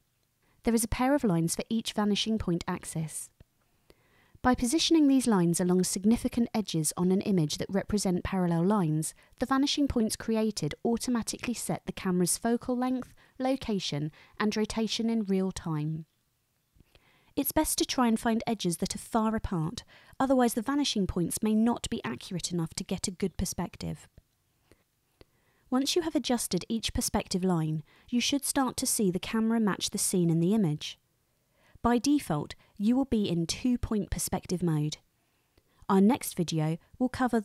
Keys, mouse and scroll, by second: 5.0-7.2 drag, 10.2-13.8 drag, 15.0-18.1 drag, 19.5-23.4 drag, 27.8 click, 29.2 g.